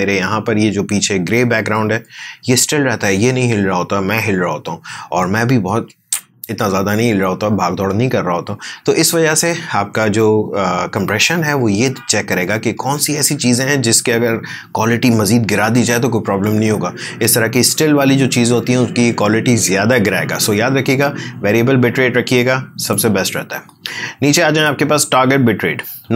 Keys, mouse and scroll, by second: 22.9-26.1 drag.